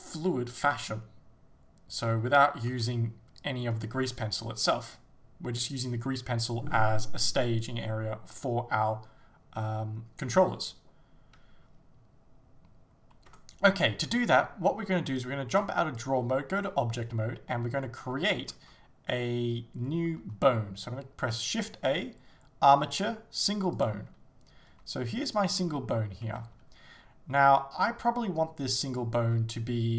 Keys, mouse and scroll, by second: 2.7 g, 4.2 right click, 13.3 Tab, 16.1-25.4 drag, 16.6-17.0 scroll down 2, 17.0-17.8 scroll up 2, 17.8-19.4 scroll down 2, 23.9 shift+a, 24.7 g, 25.4 right click, 25.6 scroll up 1, 26.5-29.0 drag, 26.5 s, 29.3-29.9 drag, 29.3 g.